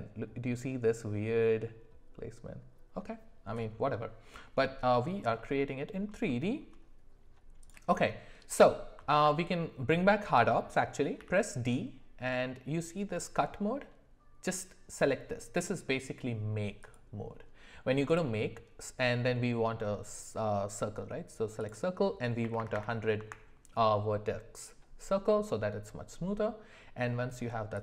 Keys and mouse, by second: 5.4 middle click, 6.3 shift+middle click, 7.6 click, 9.1 alt+w, 11.2 d, 22.7 KP_0, 27.7 click.